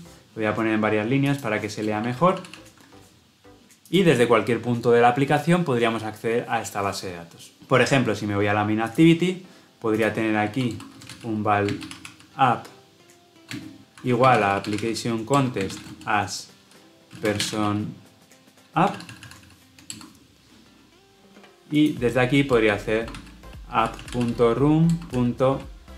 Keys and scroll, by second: 2.3 ctrl+alt+l, 2.4 ctrl+alt+o, 15.2 Return, 19.8 Return, 24.8 Return.